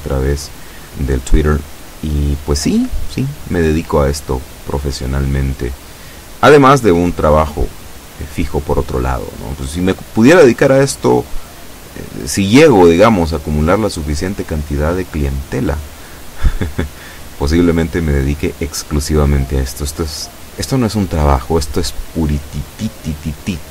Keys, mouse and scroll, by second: 12.0 e.